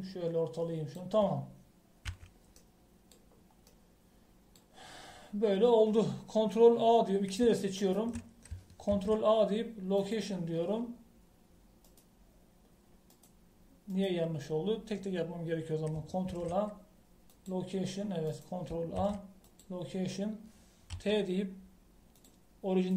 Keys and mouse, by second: 0.7 middle click, 1.4-3.1 drag, 3.1 KP_1, 9.9 ctrl+a, 17.3 ctrl+a, 20.0 ctrl+a, 21.9 ctrl+t.